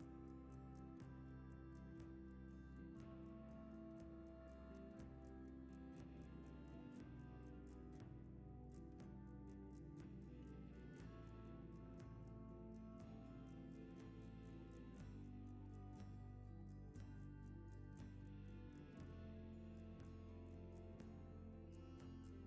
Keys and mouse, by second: 0.6-1.0 shift+middle drag, 1.5 Tab, 3.1 click, 3.4 alt+z, 3.9 click, 5.1 x, 5.9 alt+z, 6.7 Tab, 7.1 s, 8.2 g, 9.6 g, 10.7 s, 11.5 s, 13.4 g, 14.1-14.6 middle drag, 15.9 drag, 19.6 shift+middle click, 20.1 g, 21.9 g.